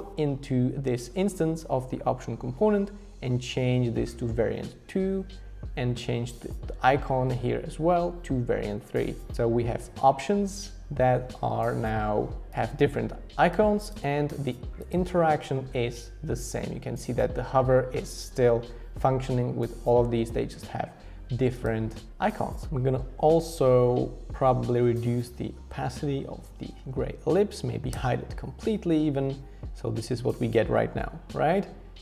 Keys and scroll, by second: 22.6 Return, 24.3 shift+Down, 24.4 shift+Down, 24.5 shift+Down, 24.7 shift+Down, 24.8 shift+Down, 25.0 shift+Down, 25.5 shift+Down, 26.4 shift+Down, 26.9 shift+Down, 27.2 shift+Down, 27.4 shift+Down, 27.9 Return.